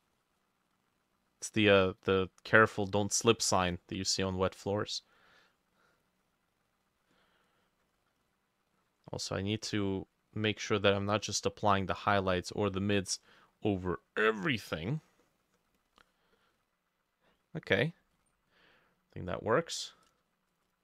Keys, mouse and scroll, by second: 15.5-20.5 drag.